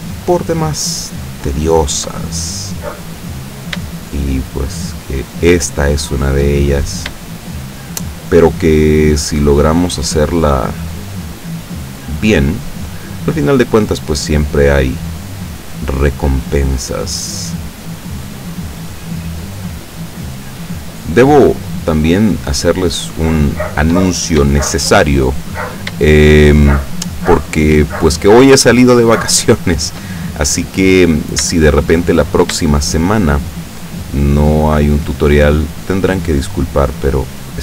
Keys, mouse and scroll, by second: 0.1 shift+right click, 0.7 shift+right click, 1.2 shift+right click, 1.8 shift+right click, 2.2-4.0 shift+middle drag, 4.4 shift+right click, 4.8 shift+right click, 5.2 shift+right click, 6.2 shift+right click, 6.7-7.4 shift+middle drag, 7.8 right click, 8.4-9.6 middle drag, 9.9 right click, 11.0 right click, 11.4 right click, 11.9 shift+right click, 12.2 shift+right click, 12.6 shift+middle click, 13.4 shift+right click, 13.8 shift+right click, 14.4 shift+right click, 15.0 shift+right click, 15.3 shift+right click, 15.7 shift+right click, 16.3 shift+right click, 16.7 shift+right click, 17.1 shift+right click, 17.5 shift+right click, 17.9 shift+right click, 18.7 shift+right click, 19.1 shift+right click, 19.7 shift+right click, 20.0 shift+right click, 20.3 shift+right click, 21.0 shift+right click, 22.3 shift+right click, 22.9-24.0 shift+middle drag, 24.7 shift+middle click, 26.1-28.3 shift+middle drag, 29.4 shift+middle click, 30.3-31.4 shift+middle drag, 31.6 shift+middle click, 32.2 shift+middle click, 33.3 shift+right click, 33.8 shift+right click, 34.3 shift+right click, 35.1 shift+right click, 35.4 shift+right click, 36.1 shift+right click, 37.1 shift+right click, 37.5 shift+right click.